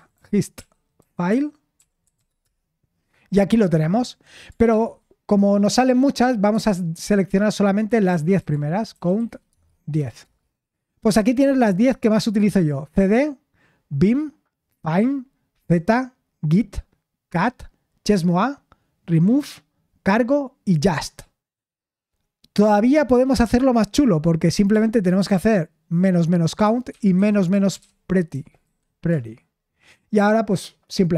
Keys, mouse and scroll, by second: 0.0-2.7 typing, 4.7 ctrl+p, 6.5 space, 7.9-10.5 typing, 25.0 ctrl+p, 26.6-29.1 typing.